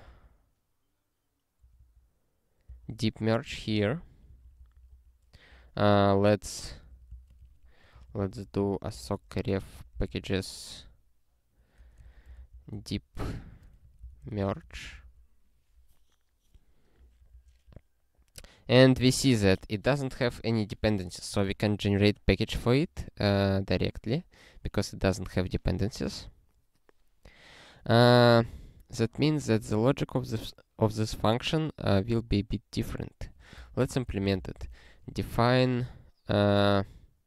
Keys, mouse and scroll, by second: 5.5 super+o, 6.9 ctrl+n, 7.1 Return, 7.2-10.7 typing, 11.8-14.8 typing, 29.2 click, 32.3 scroll up 1, 33.2 click, 33.5 Return, 33.6-35.6 typing.